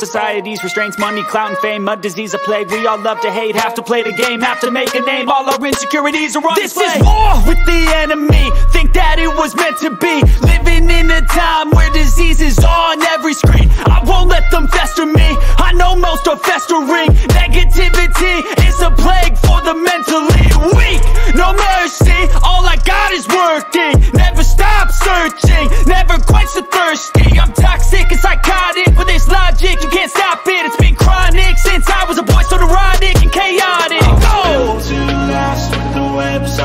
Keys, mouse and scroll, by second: 0.1 shift+click, 1.6 shift+click, 2.6 shift+click, 5.0 shift+click, 6.2 shift+click, 8.2 shift+click, 11.7 shift+click, 12.8 shift+click, 14.8 shift+click, 16.4 shift+click, 21.0 shift+click, 22.3 shift+click, 23.0 shift+click, 24.7 shift+click, 25.7 shift+click, 26.2 shift+click, 26.8 shift+click, 27.4 shift+click, 27.8 shift+click, 29.0 h, 29.2 click, 30.2 g, 30.8 click, 32.2 ctrl+d, 33.3 click, 33.9-35.7 drag, 35.9 ctrl+-.